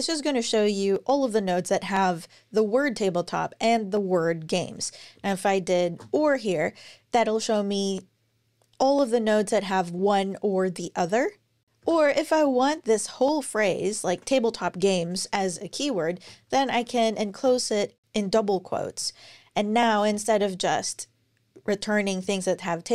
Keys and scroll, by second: 5.0 alt+Left, 5.3-6.1 typing, 11.6 alt+BackSpace, 13.9 super+Left, 16.0 shift+', 16.4 super+Right, 17.1 shift+'.